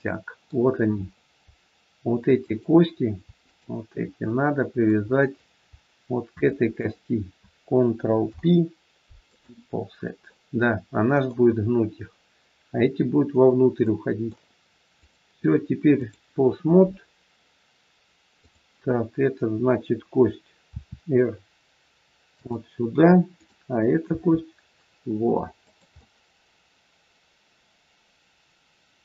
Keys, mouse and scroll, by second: 0.9 scroll up 1, 2.3 click, 3.3 shift+click, 4.2 middle click, 4.2 scroll up 1, 5.1-5.4 scroll down 2, 6.3 shift+click, 8.2 ctrl+p, 10.3 middle click, 13.8 middle click, 15.0 click, 18.3 click, 20.7 r, 23.3 click, 24.0 r, 26.0 middle click.